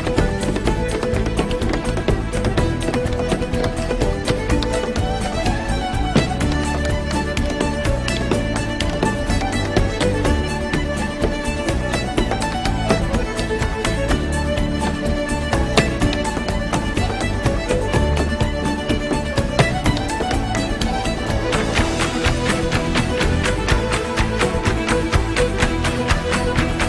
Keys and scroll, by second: 11.2 alt+super+z, 13.8 Escape, 21.8 super+j.